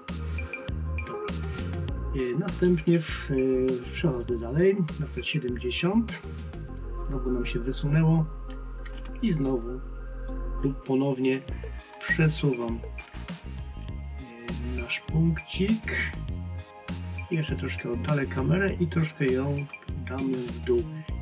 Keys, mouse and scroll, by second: 5.0 click.